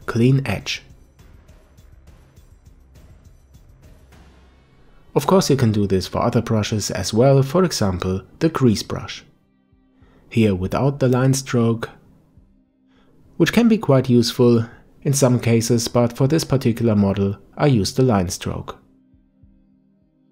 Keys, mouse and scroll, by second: 4.1 KP_5, 6.8 click, 9.0-12.1 drag, 14.0 ctrl+z, 15.5-18.6 drag.